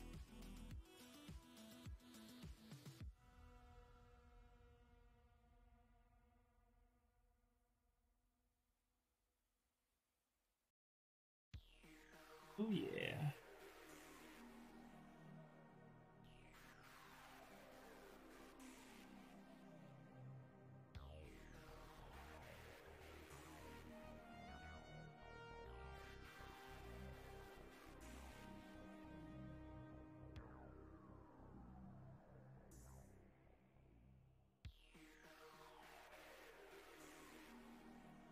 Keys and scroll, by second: 32.6 ctrl+z, 33.5 ctrl+z, 34.7 ctrl+z, 35.5 ctrl+z.